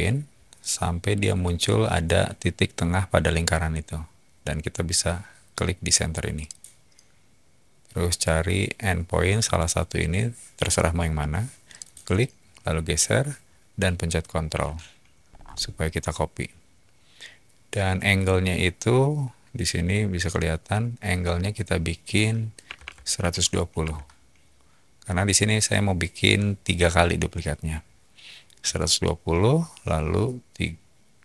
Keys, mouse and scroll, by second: 6.4 click, 11.7 click, 11.9-12.7 typing, 15.3 middle click, 16.5-18.7 typing, 16.6 scroll down 1, 22.4-23.7 typing, 23.8 Return.